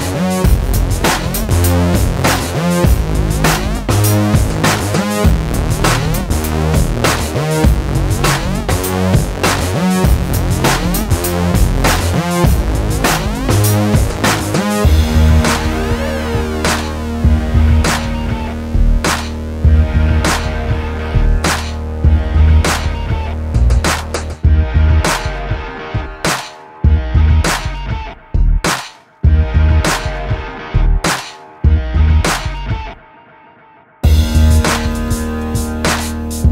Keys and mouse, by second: 0.2 a, 0.4 click, 1.0 r, 1.5 click, 2.3 r, 2.7 click, 3.7 r, 4.2 click, 4.8 a, 5.0 ctrl+r, 5.9 a, 6.0 click, 7.2 a, 7.3 click, 7.7 g, 8.5 a, 8.7 click, 9.0 g, 11.2 a, 11.6 click, 12.0 click, 13.0 a, 13.3 KP_7, 13.6 middle click, 13.9 click, 14.5 a, 14.6 click, 15.2 a, 15.5 KP_1, 16.3 ctrl+r, 18.1 s, 19.0 a, 19.2 click, 19.7 z, 19.9 ctrl+Tab, 20.3 click, 20.8 click, 21.1 shift+d, 21.6 p, 22.3 KP_1, 22.8 click, 23.6 click, 24.4 click, 24.6 Tab, 25.0 Tab, 25.2 h, 25.5 click, 25.6 Tab, 26.4 z, 26.6 click, 27.2 click, 28.0 click, 28.7 click, 29.0 a, 29.2 click, 30.1 a, 30.5 click, 31.2-34.2 typing, 33.0 click, 34.8 click, 35.1 click, 35.6 click.